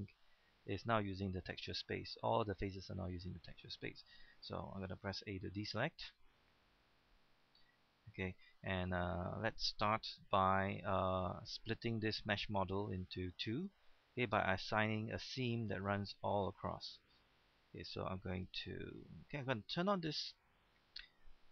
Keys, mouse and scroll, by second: 5.7 a, 6.1-6.6 scroll up 1, 6.6 scroll down 1, 6.9-10.2 middle drag, 10.2 scroll up 1, 11.0 shift+middle click, 11.1 scroll down 1, 11.3-13.9 middle drag, 13.9-14.2 scroll up 1, 14.2-18.2 middle drag, 18.2 scroll up 1, 18.5-21.5 middle drag.